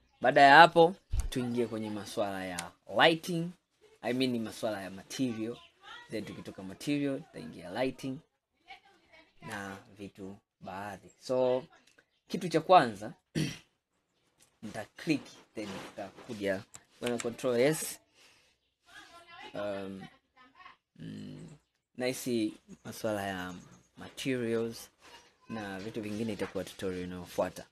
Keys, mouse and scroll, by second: 3.0 scroll up 1, 3.5 scroll down 1, 4.0-7.1 middle drag, 7.2 scroll up 2, 7.8 scroll down 1, 9.5-9.9 scroll down 3, 9.9-10.5 scroll up 5, 11.2-13.7 middle drag, 13.7-14.5 scroll down 2, 14.5 click, 17.1 ctrl+s.